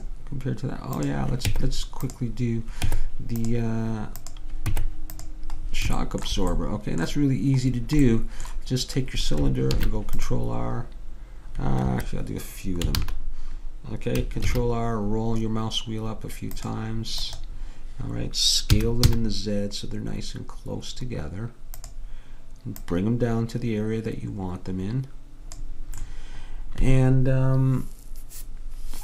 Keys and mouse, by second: 1.1-2.9 drag, 1.5 Tab, 3.0 Tab, 4.3-6.2 drag, 4.7 Tab, 6.2 middle click, 9.8 ctrl+r, 13.1 ctrl+z, 14.5 ctrl+r, 18.8 s, 22.9-24.8 drag, 26.1-29.0 middle drag.